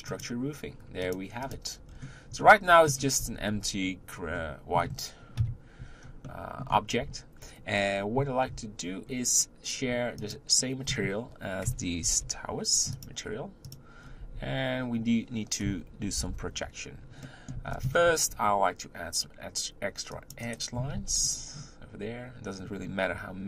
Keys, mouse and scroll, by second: 0.1 click, 1.0 click, 1.4 click, 1.9 scroll down 2, 2.4-2.9 middle drag, 2.9 scroll up 1, 3.2 z, 4.3-5.3 middle drag, 5.3 KP_1, 6.2-8.8 shift+middle drag, 8.8-10.2 scroll up 2, 10.2 shift+click, 12.0 ctrl+l, 13.6 click, 14.0 scroll down 1, 14.2 Tab, 16.0 ctrl+l, 17.2-18.2 middle drag, 18.2 ctrl+r, 20.9 ctrl+r.